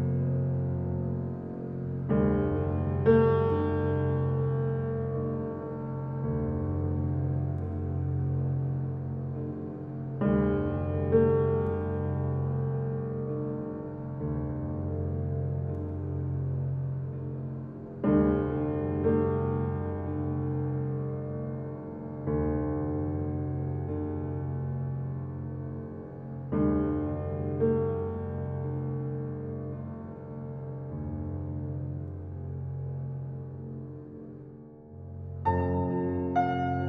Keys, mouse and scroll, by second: 1.7 click, 6.5 alt+right click, 7.7-9.7 alt+drag, 13.5 alt+click, 17.2-19.4 alt+right drag, 19.4 alt+click, 19.9 click, 24.5-29.1 drag, 29.1 ctrl+alt+z, 31.0-35.9 drag.